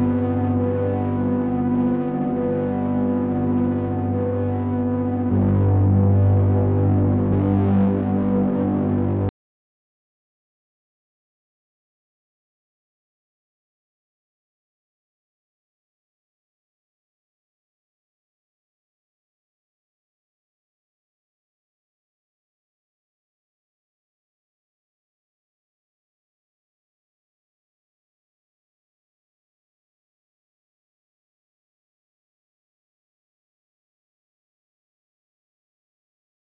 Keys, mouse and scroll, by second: 1.5 click, 3.7 click, 10.8 click, 12.3 middle click, 15.4 click, 17.3 click, 21.7 click, 25.0 BackSpace, 28.3 click, 30.1 middle click, 31.4 click, 33.4 click.